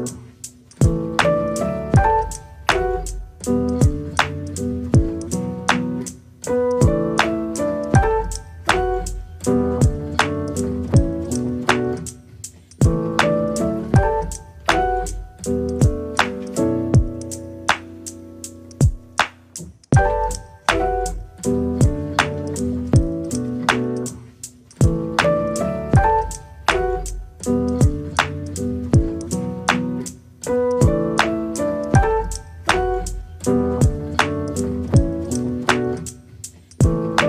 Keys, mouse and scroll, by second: 0.7 s, 3.0 s, 4.7 g, 6.4 s, 8.2 g, 11.0 click, 11.3 click, 11.6-15.1 right drag, 15.1 click, 15.6 Tab, 15.7 click, 15.9 right click, 16.3 click, 16.5 right click, 20.2 click, 20.6 click, 21.1-22.3 middle drag, 22.3 ctrl+z, 23.2 a, 23.8 r, 27.1-28.3 drag, 28.5 r, 30.1-31.3 drag, 31.7 r, 37.0 g.